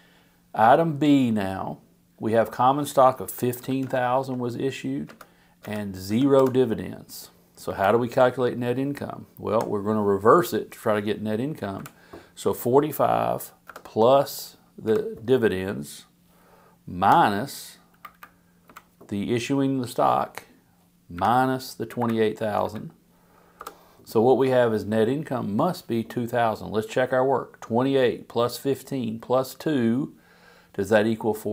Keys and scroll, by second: 3.1-4.3 typing, 5.1 Return, 6.0 0, 6.4 Home, 7.6 Up, 9.5 =, 11.6 Down, 14.8 Down, 17.0 -, 18.6 Down, 21.1 -, 22.0 Up, 23.6 Return.